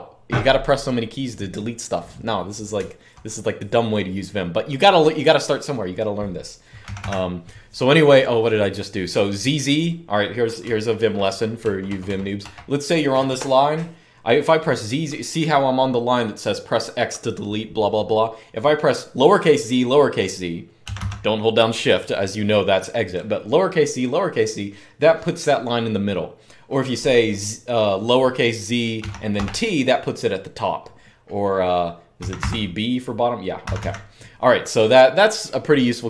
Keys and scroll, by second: 2.5-3.1 typing, 6.6 typing, 10.4-12.2 typing, 20.6 typing, 28.7-29.1 typing, 31.7-33.5 typing.